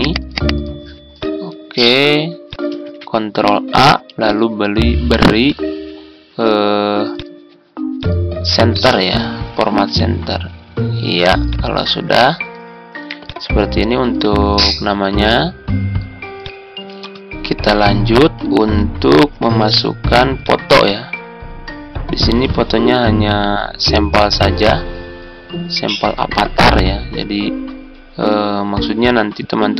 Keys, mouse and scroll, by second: 2.7 ctrl+a, 16.8 Tab, 18.4 Tab, 19.4 Tab.